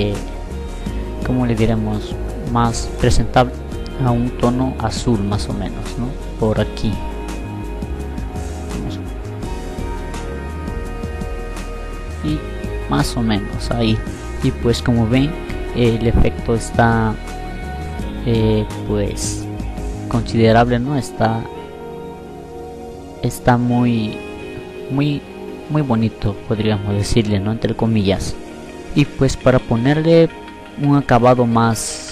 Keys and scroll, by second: 8.9 e.